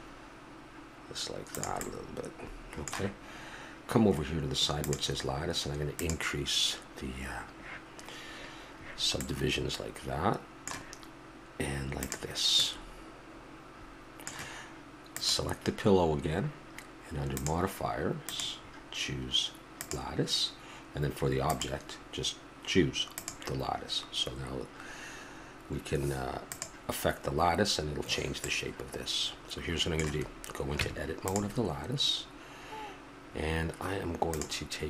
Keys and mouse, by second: 1.8-4.8 middle drag, 4.8-8.6 drag, 9.2-10.2 middle drag, 12.0 click, 12.6-13.8 middle drag, 21.6-28.4 right drag, 28.4-29.3 middle drag, 29.3 right click, 30.8 Tab.